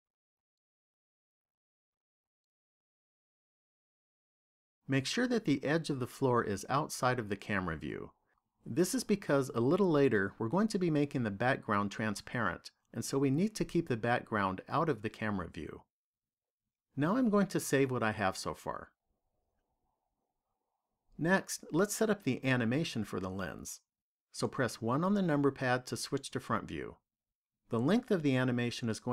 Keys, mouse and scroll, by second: 2.3 shift+middle click, 18.0 click, 24.8 KP_1.